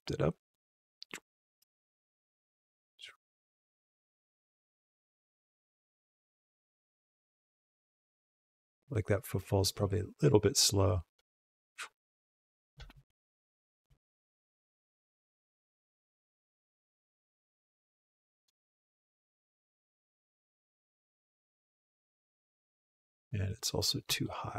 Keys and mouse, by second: 0.4-5.7 drag, 6.1 click, 6.4 g, 7.2 click, 7.4 g, 8.4 click, 8.6 g, 9.5 g, 10.7 click, 11.1 space, 12.5 space, 13.5 click, 13.8 g, 15.9 click, 16.1 space, 17.6 click, 17.6 space, 18.3 space, 19.4 space, 19.9 g, 21.4 click, 22.0 click, 22.2 click, 23.6 click, 24.0 shift+click, 24.1 shift+middle click, 24.3 shift+click, 24.3 shift+middle click.